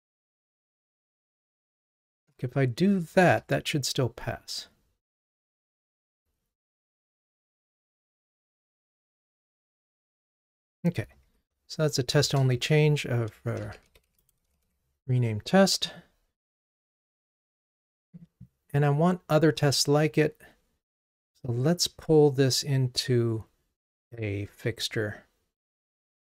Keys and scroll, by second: 2.3 ctrl+Tab, 3.3 ctrl+r, 11.3 super+k.